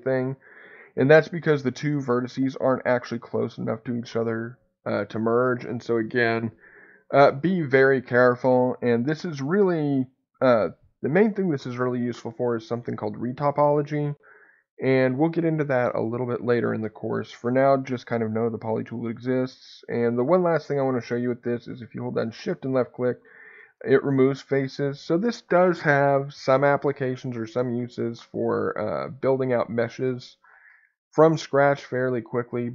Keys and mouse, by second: 1.0-4.1 middle drag, 9.1 click.